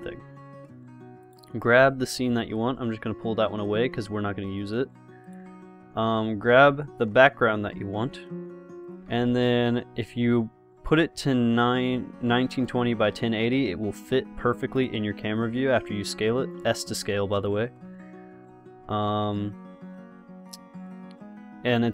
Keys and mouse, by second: 1.5 right click, 2.3 g, 5.5-7.4 drag, 6.8 g, 9.3 s, 13.1 g, 15.0 s, 18.1 s.